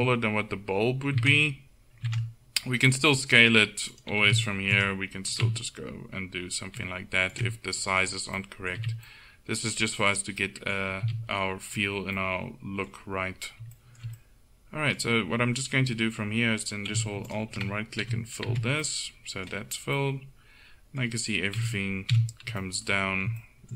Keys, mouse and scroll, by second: 3.4-4.8 right drag, 4.1 s, 5.3 s, 7.8 middle click, 8.8 Tab, 11.1 a, 14.7 middle click, 14.9 middle click, 17.3 right click, 18.1 f, 18.6 Tab, 18.9 middle click, 21.8 KP_1, 22.3 a.